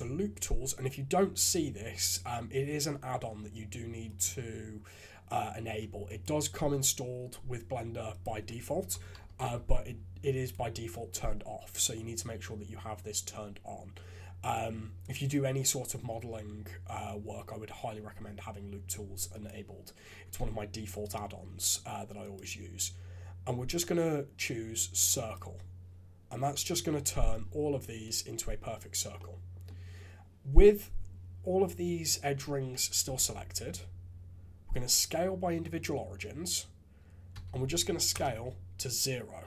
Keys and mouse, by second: 4.2-6.3 drag, 21.2-25.3 drag, 26.3 middle click, 29.1 middle click, 37.3 s.